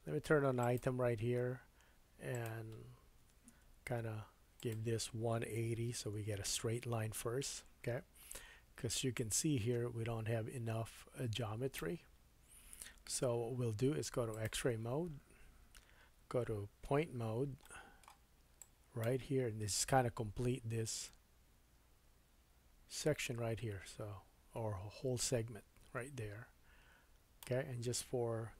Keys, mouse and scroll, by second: 0.6 click, 2.3-19.5 drag, 15.6 Tab, 17.0 1, 17.6 shift+middle click, 19.3-20.1 scroll up 4, 20.8 click.